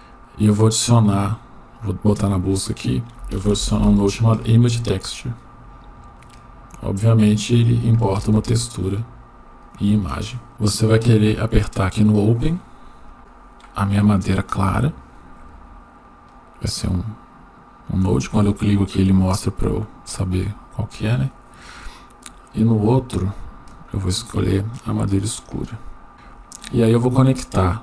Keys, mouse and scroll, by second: 8.4-9.5 shift+middle drag, 13.0 click, 16.8 click, 20.0 click, 21.2-21.5 drag, 26.1 click.